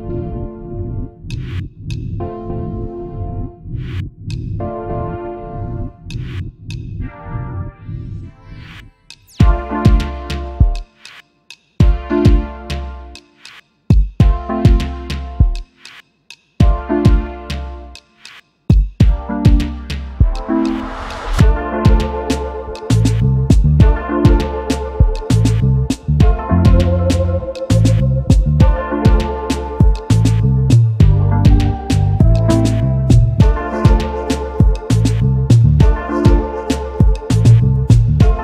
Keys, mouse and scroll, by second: 0.1 ctrl+z, 1.3 ctrl+z, 3.3 right click, 4.0 double click, 8.5 double click, 10.4 right click, 11.2 double click, 14.2 space, 14.5 alt+scroll down 1, 14.7 space, 19.4 alt+scroll up 1, 22.4 double click, 22.6 alt+scroll up 1, 23.1 alt+scroll up 2, 27.1 alt+scroll, 27.5 ctrl+r, 34.9 Delete, 35.4 alt+scroll down 1, 36.2 double click, 36.5 shift+click.